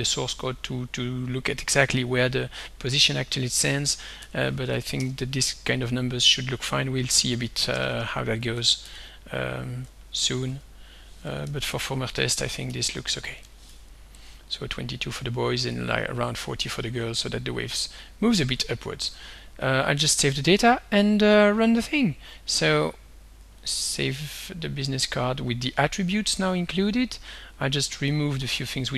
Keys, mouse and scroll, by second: 2.9 2, 3.9 ., 4.2 0, 4.7 4, 5.0 Return, 6.7 2, 7.7-10.1 typing, 10.3 Tab, 11.4 Left, 11.7 Down, 12.6 ., 13.4 0, 13.7 4, 14.2 click, 19.1 ctrl+s, 20.6 click, 22.6 click, 23.6 click, 24.0 ctrl+s, 27.6 click, 28.2 shift+click.